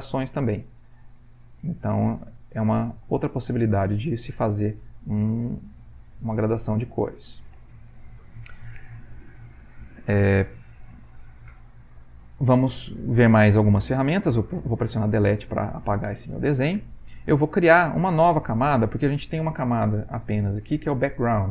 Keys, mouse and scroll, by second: 6.6 o.